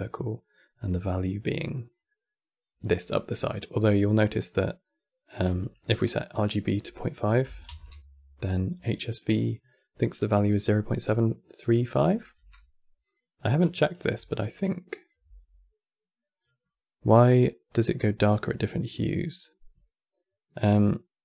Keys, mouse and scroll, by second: 11.4-11.8 middle drag, 11.8 click, 12.1 q, 13.6 click, 13.9 q, 14.6 click, 14.9 x, 20.5 click.